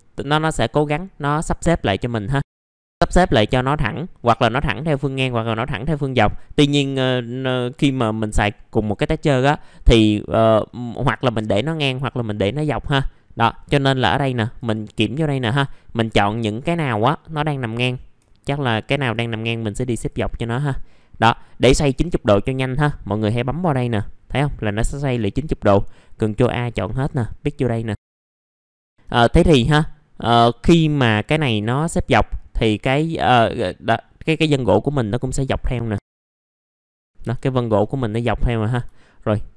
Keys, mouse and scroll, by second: 0.6-1.8 scroll up 1, 1.8 middle click, 2.5 click, 4.1 middle click, 9.0-9.7 scroll up 1, 9.7 middle click, 10.6-13.0 scroll down 1, 13.0 middle click, 14.5 click, 18.5 ctrl+click, 19.9 ctrl+click, 23.1 click, 26.4-27.4 drag, 28.2 middle click, 28.5 scroll down 1, 29.1-30.4 scroll up 1, 30.4 middle click, 30.7-31.2 scroll down 1, 31.2-31.6 scroll up 1, 31.8 middle click, 32.4-34.3 scroll up 1, 34.3-34.8 scroll down 1, 34.8 middle click, 36.5 scroll down 1, 37.0 scroll up 1, 37.1 middle click, 37.2 scroll down 1, 37.4 alt+middle click, 38.9 alt+middle click.